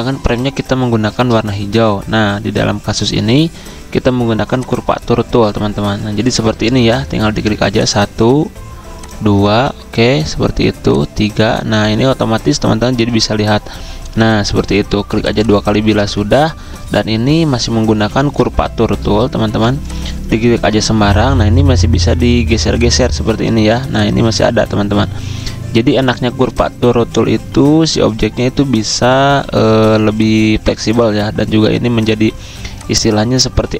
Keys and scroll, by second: 16.1 x, 17.9 s, 19.5 v, 20.8 ~.